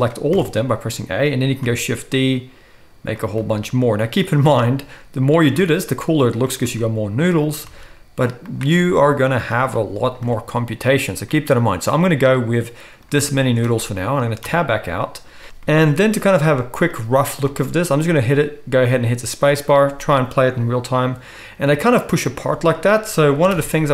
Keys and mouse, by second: 0.3 a, 1.6 shift+d, 3.2-13.8 shift+middle drag, 3.4 shift+d, 4.5 shift+d, 5.6 shift+d, 6.7 shift+d, 7.7 shift+d, 14.5 Tab, 15.4 shift+Left, 17.5 space, 21.8 space, 23.5 shift+Left.